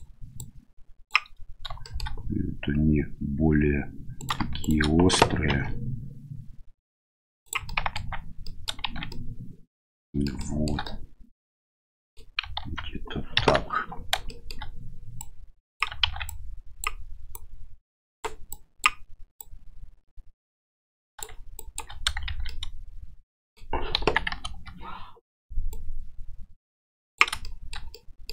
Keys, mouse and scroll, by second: 0.4 click, 1.8 shift+middle click, 4.2 right click, 4.6 shift+right click, 5.5 ctrl+b, 7.6 click, 8.5 click, 8.9 shift+z, 9.2-10.3 drag, 10.4 shift+click, 10.9 click, 11.4 middle click, 12.6 ctrl+z, 13.3 KP_1, 14.3 shift+middle click, 15.2 click, 16.0 shift+z, 16.3 click, 17.3 click, 18.6 click, 19.4-21.2 drag, 21.6 shift+click, 22.3 shift+z, 22.4-23.6 middle drag, 24.0 KP_1, 24.4 KP_3, 25.7-27.2 drag, 27.4 shift+middle click, 28.0 middle click.